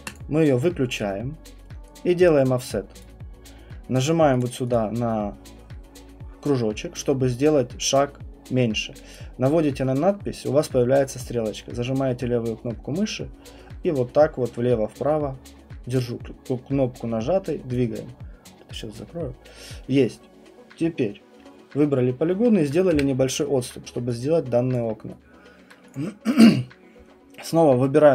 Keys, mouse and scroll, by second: 0.1 click, 3.0 click, 4.0 click, 4.4 click, 4.7 click, 9.1 click, 17.7 click, 18.8 click, 20.2 middle click, 22.9 Delete, 24.7 alt+click, 25.7 right click, 25.9 click, 26.3 click.